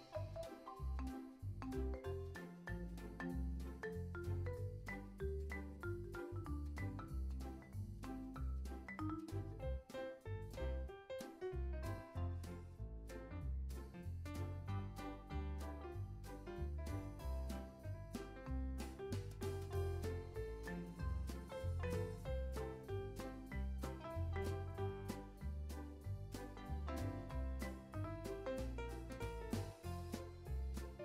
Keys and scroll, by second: 0.4 c, 0.7 super+v, 1.4 super+s, 18.9 super+z, 24.6 Delete.